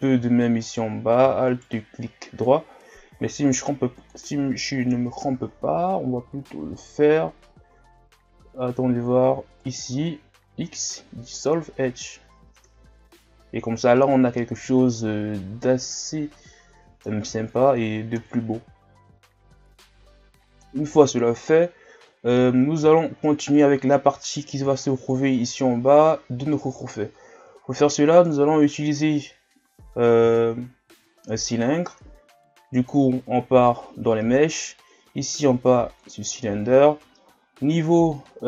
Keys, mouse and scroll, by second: 0.7 alt+right click, 1.5 alt+right click, 4.0 click, 4.7 scroll up 2, 5.4-6.2 scroll down 5, 6.3 scroll up 3, 7.6 scroll down 4, 8.5-8.8 scroll up 2, 9.6 alt+right click, 10.5 x, 12.2 scroll down 5, 12.5 Tab, 13.1-14.0 scroll up 1, 14.0-17.0 middle drag, 18.1 KP_1, 20.0-21.7 shift+scroll up 5, 21.7 scroll down 3, 22.2 ctrl+scroll up 1, 23.0 shift+scroll down 2, 24.8 shift+scroll down 6, 25.1 scroll up 1, 27.2-27.5 scroll down 3, 27.5 shift+scroll up 3, 30.8 shift+a, 36.8 shift+scroll down 3, 38.2-38.4 shift+scroll down 1.